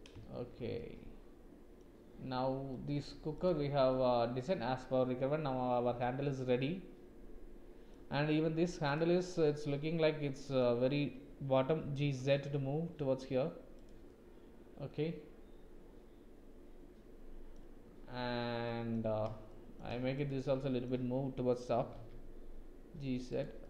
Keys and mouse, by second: 0.3 shift+z, 0.8 click, 2.7 click, 3.9-4.5 middle drag, 4.3 drag, 4.5 click, 4.6 middle click, 4.7 click, 4.8-7.9 middle drag, 8.8 click, 9.4 click, 11.8 g, 14.8-17.6 drag, 18.7 click, 19.5 shift+click, 20.2 click, 20.4 click, 21.8 g.